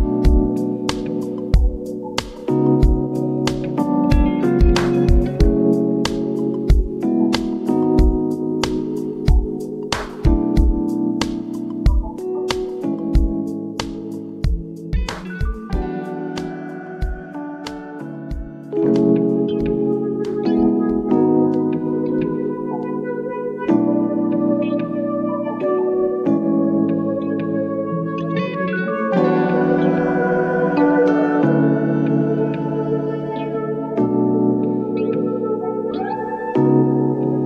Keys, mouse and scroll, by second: 1.5 click, 2.7 click, 4.3 ctrl+t, 5.6-7.6 alt+drag, 7.6 Return, 10.5 ctrl+t, 11.0-12.6 drag, 12.6 Return, 14.3 click, 15.3 scroll up 1, 16.3 ctrl+click, 19.0 ctrl+t, 21.9-24.7 drag, 24.7 Return, 26.0-27.0 scroll down 1, 27.1 Up, 28.5 scroll down 1, 30.1 t, 32.1 click, 32.8 Right, 35.3 t, 37.1 click.